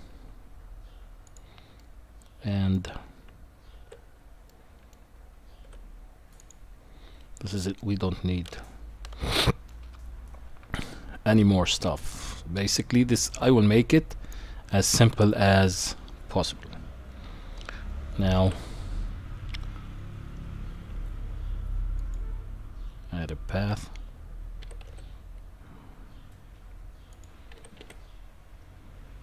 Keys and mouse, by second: 1.9 middle click, 3.3 Tab, 4.5-4.9 middle drag, 5.6 q, 7.8-9.7 middle drag, 18.3 shift+a, 24.6 g, 27.5 g.